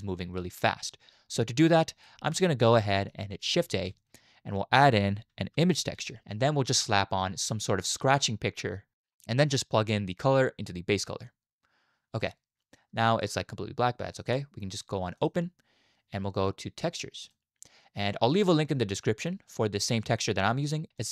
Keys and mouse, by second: 1.6 click, 2.2 click, 2.8 click, 2.8 middle click, 2.8 right click, 3.7 shift+a, 10.1-11.2 drag, 12.2-12.6 drag, 12.2-14.2 middle drag, 12.2-12.6 right drag, 15.1 click.